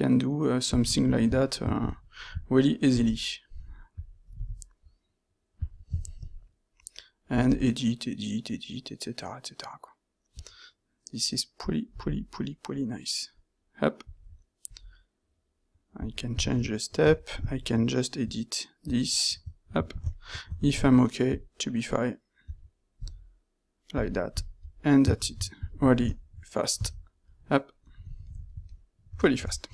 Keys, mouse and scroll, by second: 16.7 ctrl+middle click, 20.6 ctrl+shift+q, 25.2 shift+z, 28.5 ctrl+shift+middle drag, 28.9 ctrl+middle click, 29.0 z.